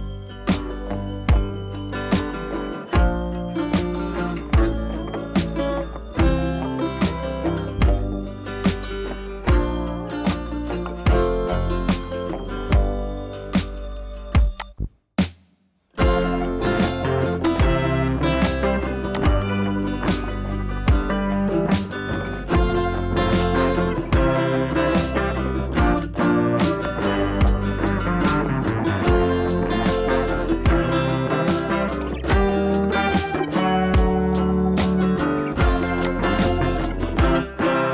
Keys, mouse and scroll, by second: 11.8 ctrl+i, 12.8 scroll up 1, 14.6 click, 15.6 scroll up 1, 15.9 [, 16.4 ], 17.4-18.3 drag, 25.4 scroll down 1, 26.0 scroll down 1, 26.4 space, 26.6-27.2 click, 27.0 space, 27.2 scroll down 1, 29.8 right click, 32.2 click, 34.4 scroll down 1, 34.6 space, 34.7-35.4 click, 35.1 space, 35.4 scroll up 1, 36.0 click, 36.2-36.6 space, 37.6 click.